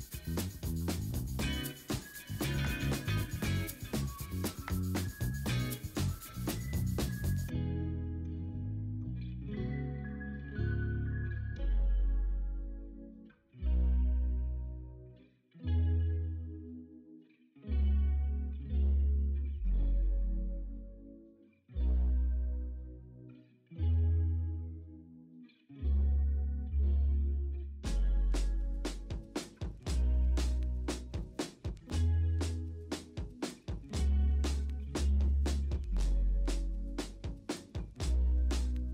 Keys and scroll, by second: 0.2-0.7 typing, 7.0 b, 7.6 x, 8.2 x, 9.0 ctrl+alt+z, 9.0 ctrl+alt+z, 10.3 3, 11.7-12.3 typing, 13.6 x, 14.1 7, 14.6 x, 16.9 x, 17.3 ctrl+z, 17.5 3, 18.4 x, 19.5-21.1 typing, 22.7 v, 26.6 Down, 26.7 Down, 26.9 Down, 27.2 Down, 28.0 Down, 29.5 ctrl+i, 29.7 b, 30.1 x, 31.1 0, 32.7-33.7 typing, 35.6 b, 36.1-36.4 m, 37.2 ctrl+z, 37.2 v, 37.7 ctrl+z.